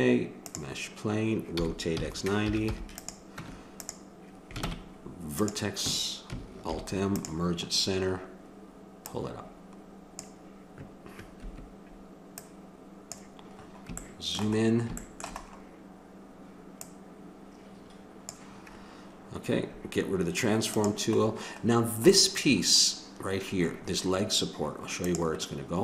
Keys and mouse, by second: 1.5 r, 3.4 Tab, 4.6 ctrl+Tab, 6.7 alt+m, 9.1-11.4 drag, 12.3 click, 14.0-15.5 middle drag, 17.8-19.1 drag, 20.7 click, 21.7 click, 22.4 middle click, 22.6-25.0 middle drag.